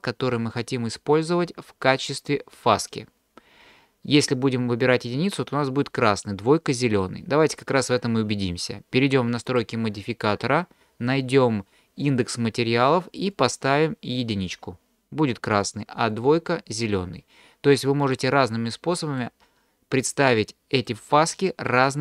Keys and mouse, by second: 9.5 click, 13.3 click, 14.2 click, 16.1 click, 18.0 click, 18.7-19.2 middle drag, 20.9-21.4 middle drag, 21.4 click, 21.4 right click.